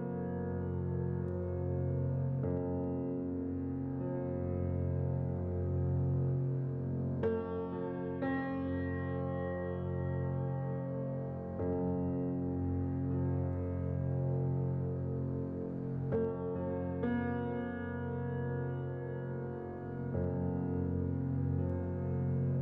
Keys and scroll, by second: 3.1 z, 5.4 Return, 9.1-9.8 typing, 15.3-15.6 typing, 15.6 Return.